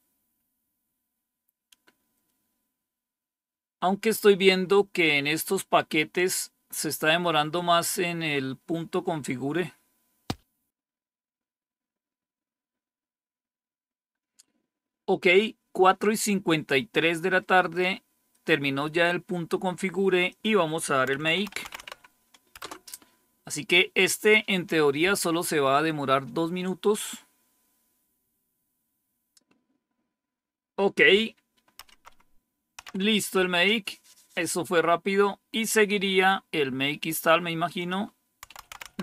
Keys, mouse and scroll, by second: 20.2 click, 20.8-22.2 typing, 22.5 Return, 31.7 Up, 32.7 Down, 36.3-36.9 scroll down 1, 36.9-37.7 scroll down 1, 37.7 click, 38.1-39.0 typing.